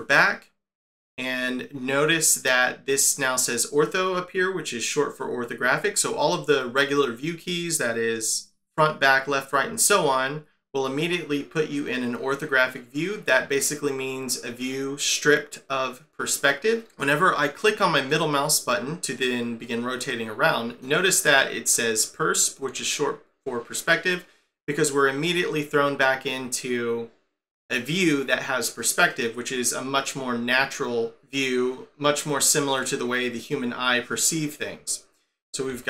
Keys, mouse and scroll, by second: 18.1 middle click, 29.1 middle click, 32.7 middle click, 35.7 1.